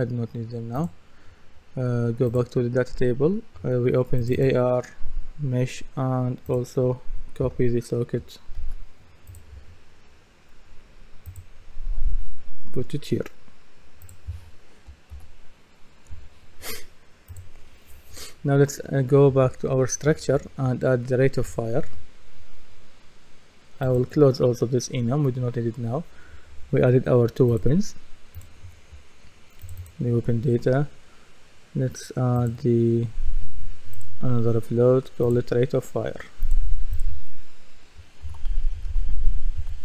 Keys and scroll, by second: 7.4 F2, 16.1 Return, 38.0-39.8 typing.